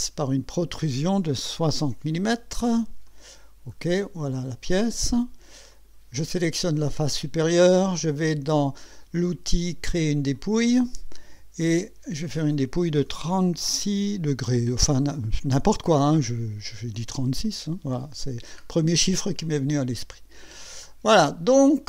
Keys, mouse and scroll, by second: 1.6 KP_6, 1.8 KP_0, 3.1 click, 3.7 scroll down 1, 4.2-5.1 drag, 5.7 click, 10.4 click, 12.4 click, 14.3 KP_6, 17.1 click, 18.0-18.3 scroll down 2, 18.6 scroll up 2, 19.4-20.6 drag, 20.9 scroll down 2, 21.2 scroll up 2, 21.7-21.8 drag.